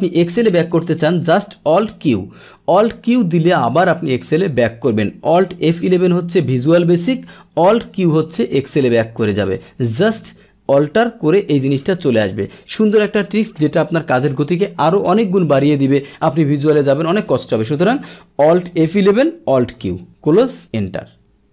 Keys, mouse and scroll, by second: 1.9 alt+q, 3.0 click, 5.6 alt+F11, 7.8 alt+q, 18.9 alt+F11, 19.8 alt+q.